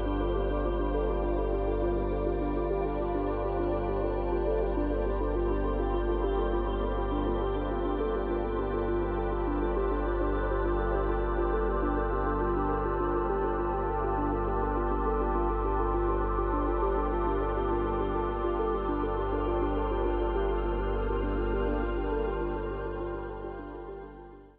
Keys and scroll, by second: 8.9 space, 11.6 space.